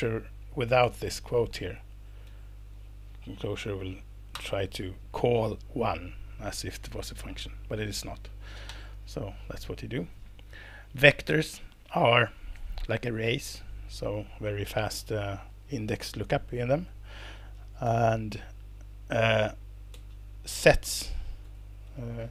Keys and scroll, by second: 0.8 BackSpace, 2.3 Left, 2.8 Right, 4.3 alt+Return, 7.1 Escape, 8.7 ', 9.1 Escape, 10.7 Down, 10.9 Left, 16.8 alt+Return, 17.8 Escape, 19.9 Page_Down, 21.4 alt+Return.